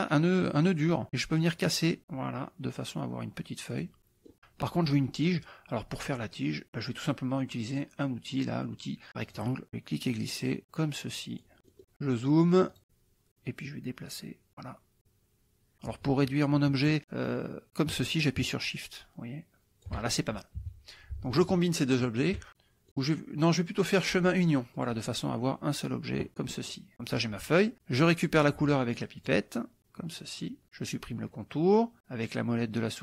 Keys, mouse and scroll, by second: 1.4-4.0 drag, 4.0 middle click, 9.2 click, 10.3-11.6 drag, 11.6 middle click, 12.7 click, 13.7-14.8 drag, 15.0-20.0 shift+drag, 20.6 KP_Subtract, 21.8 shift+click, 22.5 middle click, 23.1 click, 24.8 click, 26.3 KP_Subtract, 26.8 middle click, 29.2 click, 29.8 click.